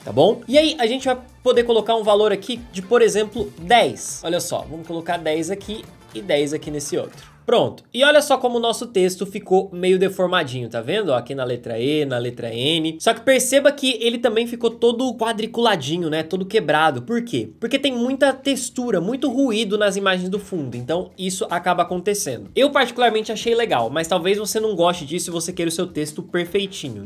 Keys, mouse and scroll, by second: 4.7-7.4 drag, 7.4-9.8 middle drag.